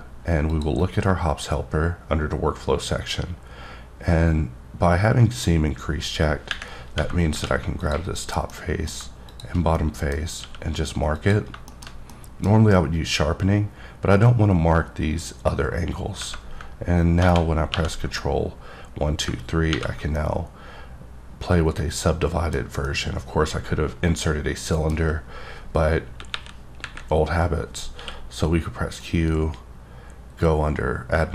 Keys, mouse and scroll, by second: 0.5 click, 7.3 3, 7.8 click, 8.5 middle click, 9.3 shift+click, 9.8 middle click, 10.4 q, 11.2 click, 11.7 shift+middle click, 17.2 ctrl+1, 17.7 ctrl+2, 18.2 middle click, 19.7 ctrl+3, 20.1-22.7 middle drag, 22.8 middle click, 26.3 KP_1, 26.8 KP_3, 28.0 q, 29.0-31.3 drag.